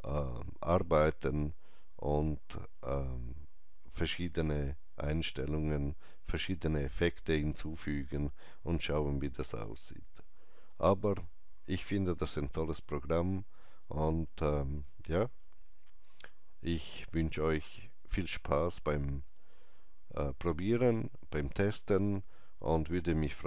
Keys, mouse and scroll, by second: 14.4 scroll down 1, 21.0-22.0 scroll down 1, 22.0-23.4 scroll up 1.